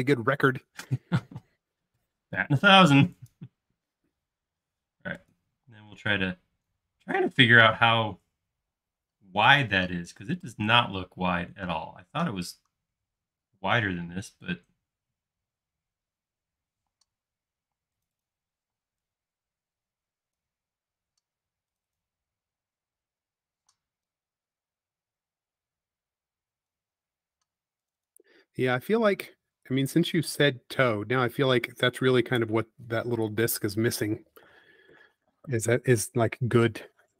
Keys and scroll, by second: 1.3 space, 2.5 typing, 3.8 Up, 5.7 space, 16.8 p, 17.8 space, 18.6 p, 20.8 typing, 22.6 space, 23.6 p, 28.7 space, 29.2 p, 32.2 Escape, 35.3 super+z.